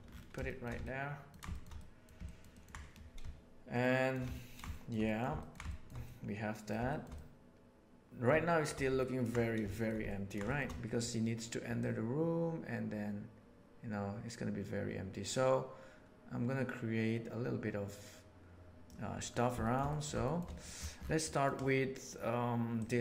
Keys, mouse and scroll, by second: 0.3 shift+middle drag, 0.7-1.3 ctrl+middle drag, 1.5 shift+middle click, 1.7 middle drag, 2.2 ctrl+middle click, 2.5 ctrl+middle click, 3.7-4.2 shift+middle drag, 4.4 ctrl+middle click, 4.7 shift+middle drag, 5.0 middle click, 5.4 ctrl+middle drag, 5.6 shift+middle drag, 6.0-6.6 middle drag, 6.8 shift+middle click, 7.1-8.2 middle drag, 8.4 shift+middle drag, 9.0 ctrl+middle click, 9.7 shift+middle click, 10.0 ctrl+middle click, 10.4 shift+middle click, 11.7-12.1 drag, 18.1-18.8 right drag, 19.6 shift+middle click, 19.9 middle click, 20.2 shift+middle drag, 21.2 middle click.